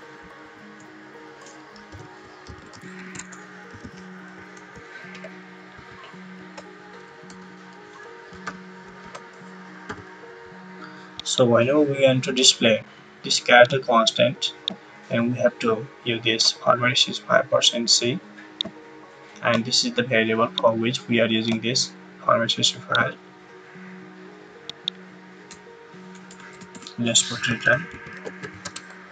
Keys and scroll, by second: 0.3 shift+', 1.6-5.7 typing, 6.3 Right, 8.0-8.9 typing, 8.9 Right, 25.4-29.1 typing.